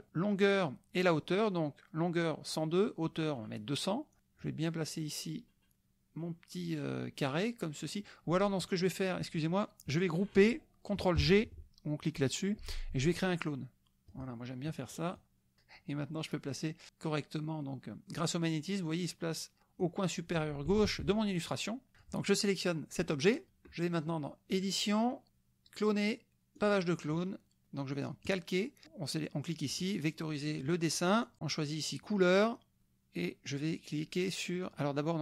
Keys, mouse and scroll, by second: 4.4-8.8 drag, 12.1 click, 14.1 click, 15.2-20.0 drag, 20.8 shift+click, 21.9 click, 24.5 click, 26.7 click, 28.2 click, 28.8 click, 29.8 click, 32.5 click.